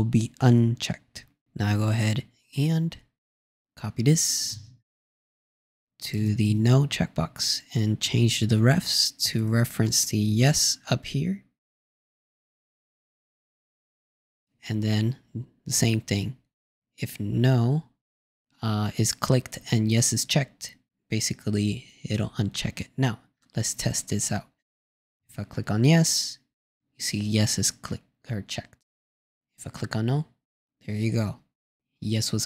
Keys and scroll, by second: 5.4 super+c, 7.4 super+v.